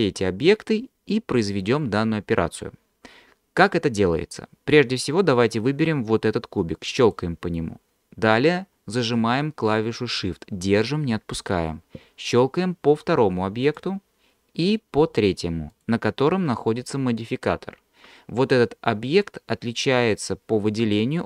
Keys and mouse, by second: 7.0 click, 13.7 shift+click, 15.8 shift+click.